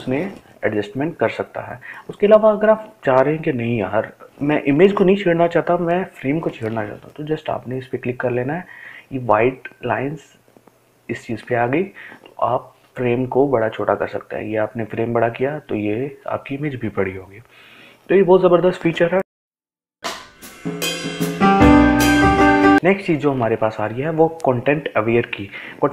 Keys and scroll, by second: 19.2 ctrl+alt+z.